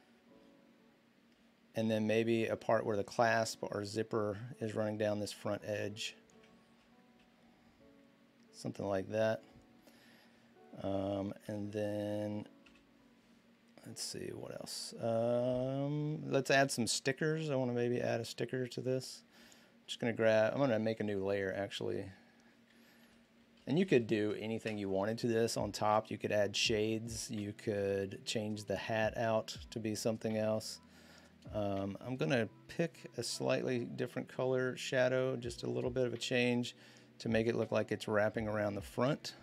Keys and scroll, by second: 6.4 ctrl+z, 11.2 v, 12.4 b, 13.5-14.0 typing, 22.6-24.6 typing.